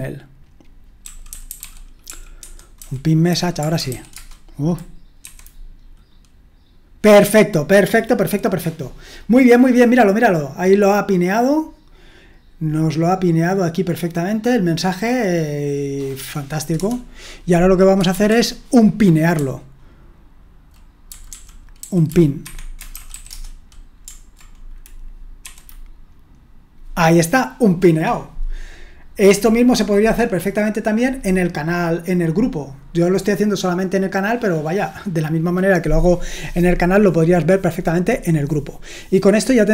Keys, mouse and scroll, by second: 0.0-4.3 typing, 5.2 F5, 16.8 Return, 18.1 typing, 19.3-23.4 typing, 22.4 Escape, 25.4 F5, 26.6-27.3 typing.